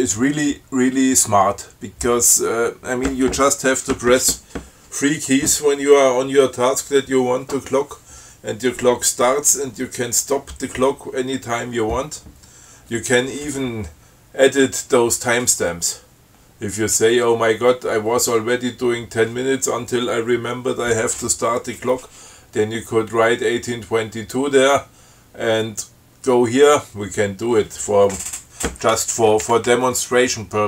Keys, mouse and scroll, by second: 28.5 Up, 29.9 Right.